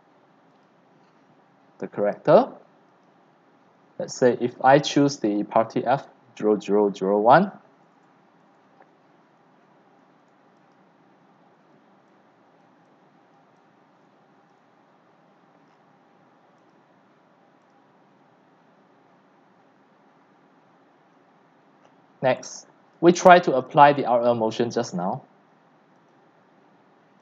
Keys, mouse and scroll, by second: 0.5 click, 2.0 click, 2.9-9.7 drag, 9.7-10.7 scroll down 5, 10.7 click, 11.2 scroll, 11.4 scroll, 11.4 scroll, 11.7 scroll, 12.2 x, 12.8 click, 12.8 c, 13.3 click, 13.6 x, 14.1 c, 14.5 click, 15.4 middle click, 15.4-16.5 scroll up 7, 15.8-16.5 middle drag, 17.0-21.1 drag, 21.1-21.6 scroll down 6, 21.6 click, 21.6-23.9 typing, 21.8 click, 22.9 click, 23.7 click, 24.2-26.0 drag, 26.3-27.2 drag.